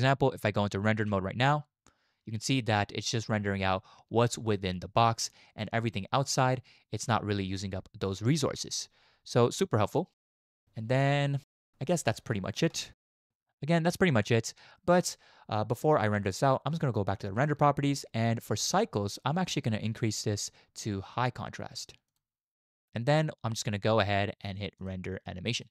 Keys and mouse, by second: 0.7 z, 10.2 z, 17.3 click, 19.9-22.2 drag, 24.8-25.7 drag.